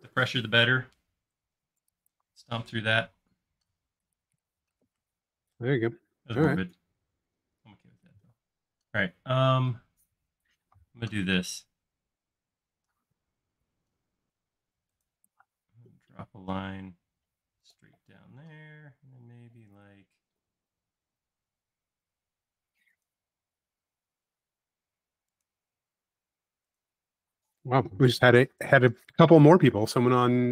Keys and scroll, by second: 5.1 i, 7.0 shift+q, 18.1 l, 27.4 space, 29.3 p.